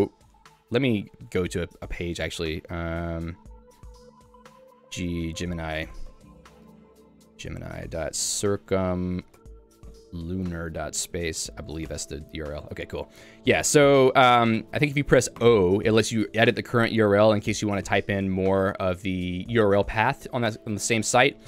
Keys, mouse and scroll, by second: 5.0 g, 11.9 Return, 15.5 o, 21.2 Escape.